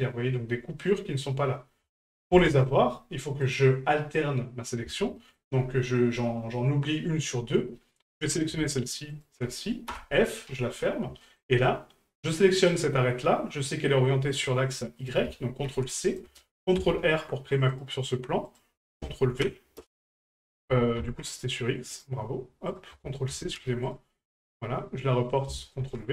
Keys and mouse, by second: 3.4 right click, 5.2 shift+middle drag, 9.1 shift+right click, 11.2 shift+middle click, 12.2 right click, 15.2-16.2 ctrl+drag, 18.5-19.8 drag, 21.9 right click, 22.7-23.9 drag, 24.3 right click, 25.3 ctrl+click.